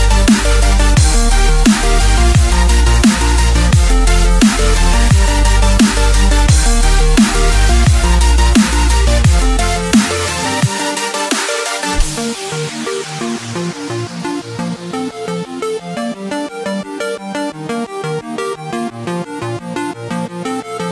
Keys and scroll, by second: 0.0 ctrl+0, 1.1-9.9 typing, 10.1 Escape, 10.5 ctrl+0, 10.7 ctrl+space, 11.2-13.4 typing, 15.2-20.9 typing.